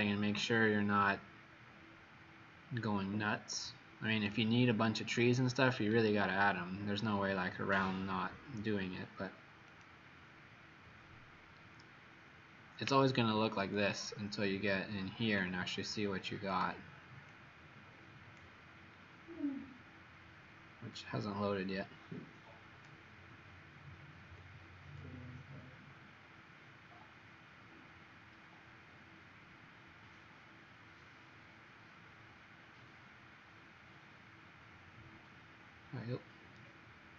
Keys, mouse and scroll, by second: 0.8-1.5 scroll down 2, 1.6-2.2 scroll down 4, 2.5-4.4 scroll down 4, 4.4 click, 6.1-7.6 scroll down 11, 9.6 click, 14.2 middle click, 16.4 click, 19.1-19.6 scroll down 5, 20.1 scroll down 2, 20.9 click, 23.5-24.3 scroll up 1, 36.5 middle click.